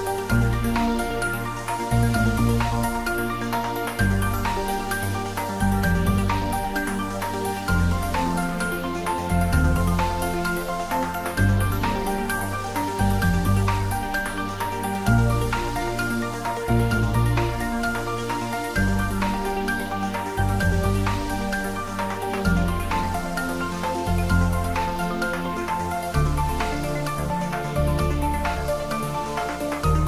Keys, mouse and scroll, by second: 7.7-11.1 drag, 11.1-13.1 drag, 13.1-15.6 typing, 13.7 click, 16.3 Return, 18.5-19.0 scroll down 1, 19.0 middle click, 19.5 scroll up 1, 20.8-26.5 drag, 26.5 scroll down 1, 29.3 click, 29.6-30.0 right drag.